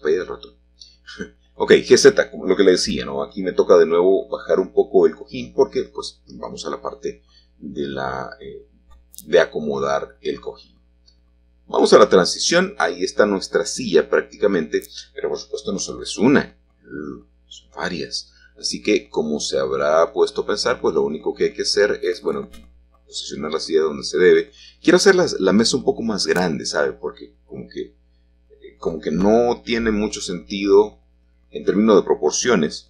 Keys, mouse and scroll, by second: 4.0 shift+click, 5.6-7.5 middle drag, 7.5-10.5 scroll down 1, 9.0-17.0 shift+middle drag, 10.9-12.0 shift+scroll down 1, 17.6-21.1 shift+drag, 21.3-22.9 drag, 23.5-29.2 shift+drag, 30.6-32.6 drag, 32.6-32.8 scroll up 1.